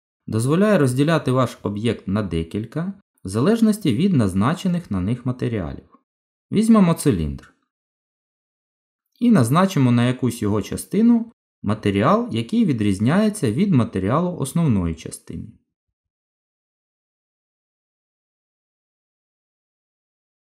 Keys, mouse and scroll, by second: 0.0 shift+click, 0.8 shift+click, 2.0 Delete, 4.6 shift+a, 7.9 middle click, 14.0 click, 15.4 click, 18.3 click.